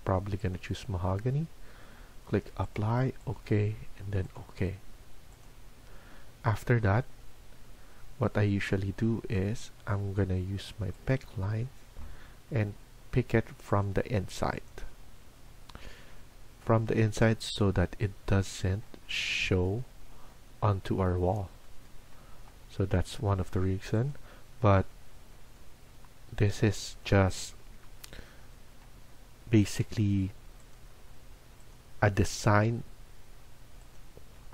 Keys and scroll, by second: 34.3 Escape.